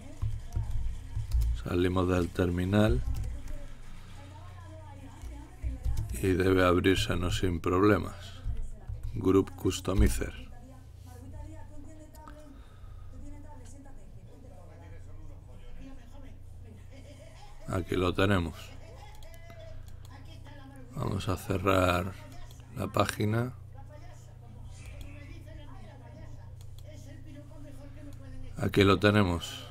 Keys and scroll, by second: 0.5-1.6 typing, 6.9-9.4 typing, 9.9 ctrl+Return.